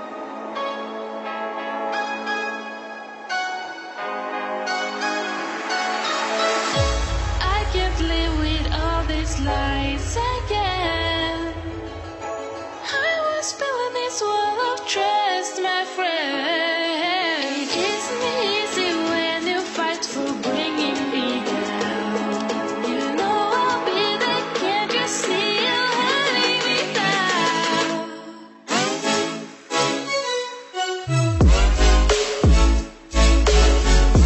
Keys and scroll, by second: 7.5 ctrl+=, 9.4 ctrl+[, 23.8 ctrl+=, 32.1 ctrl+z, 33.7 ctrl+=.